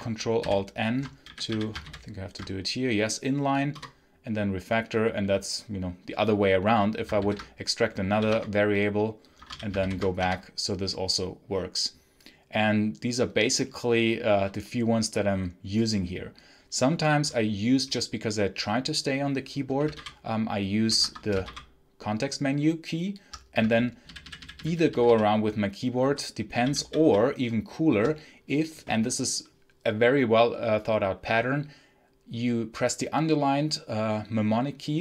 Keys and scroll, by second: 0.3 ctrl+alt+n, 1.1 w, 1.3 w, 1.7 ctrl+alt+n, 3.6 Return, 7.0 ctrl+alt+v, 8.0 i, 8.2 Return, 9.2 Escape, 9.3 l, 9.7 ctrl+alt+n, 10.1 Return, 19.8 Menu, 20.9 Escape, 21.3 Menu, 24.0 Down, 24.9 Right, 25.9 Left, 26.5 Up, 26.8 Up, 26.9 Up.